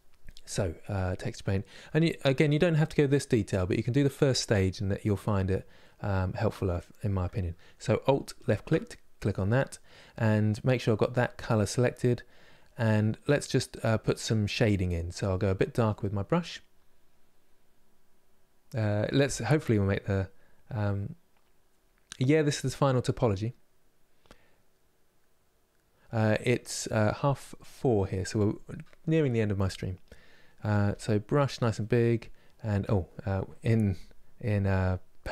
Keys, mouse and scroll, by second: 8.1 alt+click, 8.8-15.2 middle drag, 15.2 click, 15.9-18.9 middle drag, 30.6 f, 31.5-32.6 middle drag, 32.6-35.3 drag.